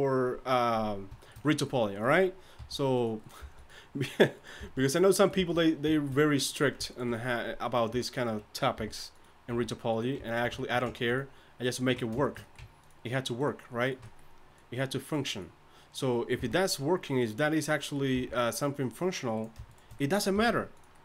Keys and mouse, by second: 2.6 g, 3.4 g, 4.6 g, 5.4 g, 6.9-9.5 drag, 8.8 r, 9.5 s, 11.1-12.7 drag, 11.1-12.3 right drag, 16.4 g, 18.1 g, 20.3 g.